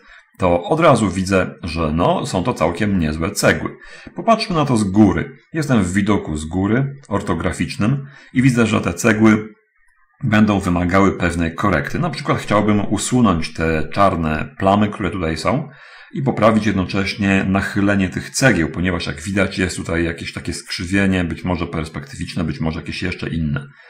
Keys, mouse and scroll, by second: 0.1 alt+z, 1.3-4.2 middle drag, 5.0 7.